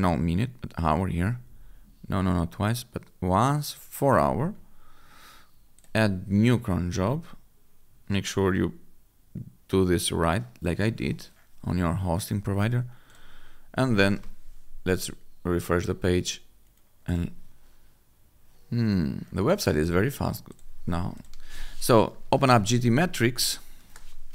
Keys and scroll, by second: 14.0 F5, 22.1 g, 23.1 t, 23.7 Return.